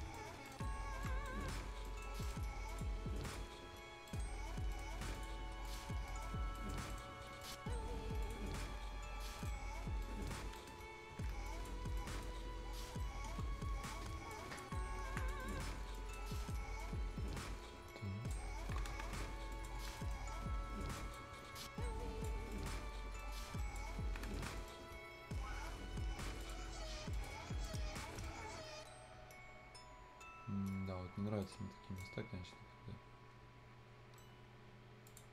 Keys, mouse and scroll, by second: 0.3 scroll down 1, 0.5 right click, 0.9 scroll down 1, 1.0 right click, 1.4 scroll up 1, 1.9 right click, 2.7 click, 4.1 right click, 4.3 scroll down 1, 4.5 scroll up 1, 4.7 right click, 5.2 click, 5.9 scroll down 1, 6.1 right click, 6.5 scroll up 1, 6.6 right click, 7.4 click, 8.7-9.2 scroll up 1, 9.2 scroll down 1, 9.4 right click, 9.7 scroll up 1, 10.0 right click, 10.4 scroll up 1, 10.6 right click, 11.0 ctrl+scroll up 1, 11.5 click, 11.8 scroll down 1, 12.0 right click, 13.3 F10, 13.5 scroll up 1, 13.9-15.4 drag, 15.6 scroll up 1, 15.9 click, 16.4 right click, 16.8-18.5 drag, 18.5 scroll down 1, 18.6 Escape, 18.7 scroll up 1, 18.8 Escape, 19.5 click, 19.8 scroll down 1, 20.0 right click, 20.5 F10, 20.5-21.0 scroll up 1, 21.0-23.9 drag, 23.9 scroll down 1, 24.1 Escape, 24.3 scroll up 2, 24.4 Escape, 24.6 middle click, 26.4 click, 27.9-28.7 scroll down 2, 28.2 right click, 28.8 scroll up 1, 29.9 scroll down 1, 30.2-30.9 scroll up 1, 30.9 scroll down 1, 31.4 right click, 32.1-32.9 scroll up 1, 34.7-35.1 scroll up 1, 35.1 click, 35.1 click.